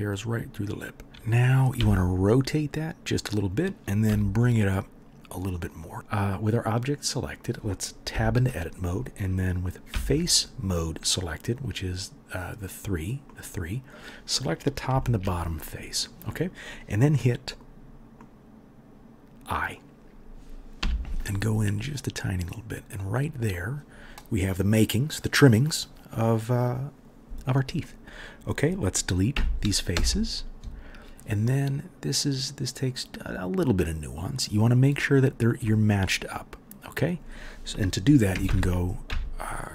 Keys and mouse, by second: 1.7 r, 4.0 g, 5.9 3, 8.2 Tab, 9.9 3, 20.8 |, 29.3 Delete, 38.4 ctrl+KP_7, 39.0 KP_7.